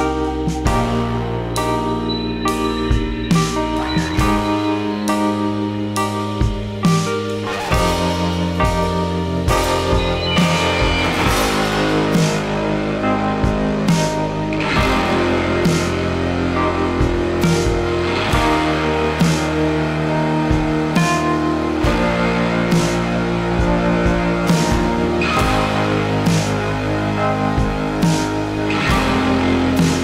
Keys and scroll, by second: 0.0-0.2 typing.